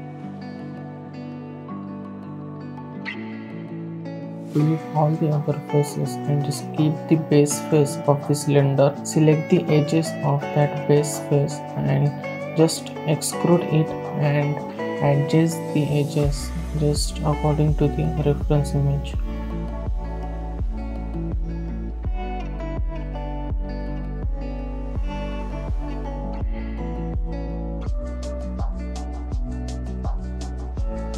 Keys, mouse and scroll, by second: 0.1 n, 1.4 click, 1.9 Tab, 2.6 3, 3.1 click, 4.6 click, 4.9 click, 6.2 x, 7.1 alt+click, 8.4 e, 10.1 middle click, 16.5 middle click, 17.0 click, 24.5 click, 26.5 click, 28.1 click, 28.8 right click, 29.6 click, 30.2 middle click, 30.4 shift+middle click, 30.6 alt+click, 30.8 scroll down 1.